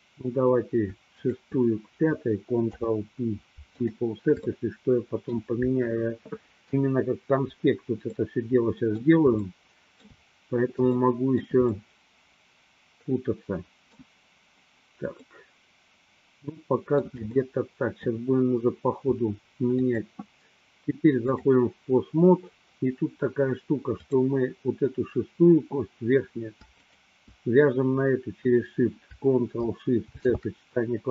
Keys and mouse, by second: 2.8 ctrl+p, 4.7 shift+middle click, 8.3-10.5 middle drag, 11.1 shift+middle click, 12.1-14.3 middle drag, 15.4-18.2 middle drag, 19.8-21.6 drag, 24.1 click, 30.1 ctrl+shift+c.